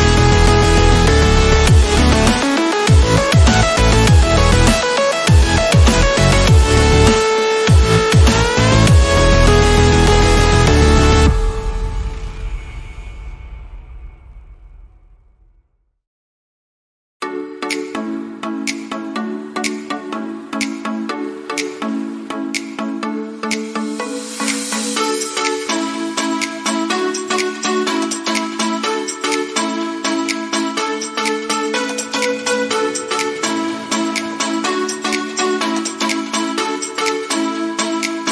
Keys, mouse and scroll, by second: 0.0 click, 5.7 ctrl+i, 7.4 click, 11.1 alt+scroll up 1, 13.5-18.0 drag, 21.3-23.4 typing, 23.4 click, 23.5 click, 27.5 click, 28.9-31.5 typing, 29.5 click, 30.5 click, 36.0 typing, 36.5-38.3 drag.